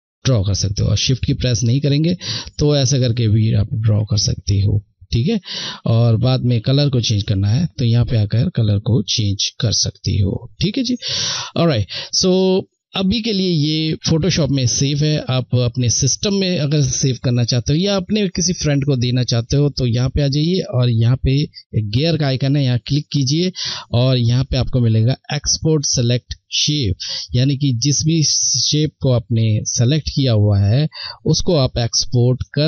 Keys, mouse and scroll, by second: 0.3 click, 0.3 shift+click, 2.8 ctrl+shift+z, 4.0-10.7 shift+drag, 18.1 click, 21.2 click, 27.0 click.